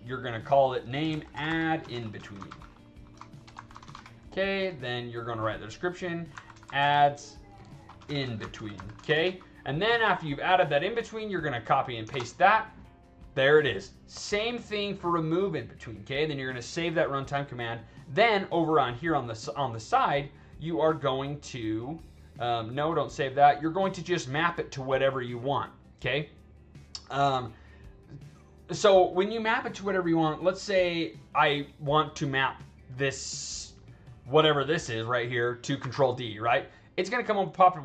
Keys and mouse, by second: 0.5 click, 0.8-4.1 typing, 6.0-9.5 typing, 6.0 click, 11.1 click, 12.0 ctrl+v, 21.6 drag, 22.5 click, 23.7 click, 27.6 click, 35.7 ctrl+d, 36.8 drag.